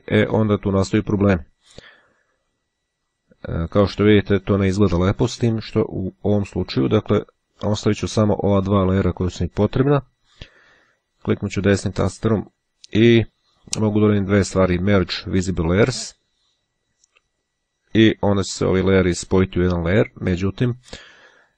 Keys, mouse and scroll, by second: 7.3-8.4 drag, 11.2-13.0 right drag.